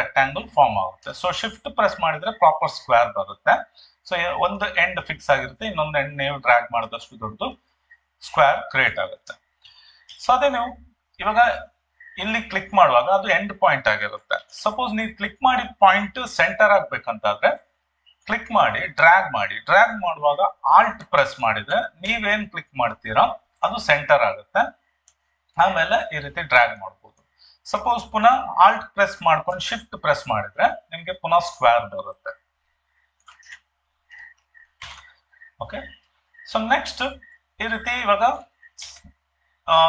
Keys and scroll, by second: 14.4 ctrl+d, 38.9 ctrl+d.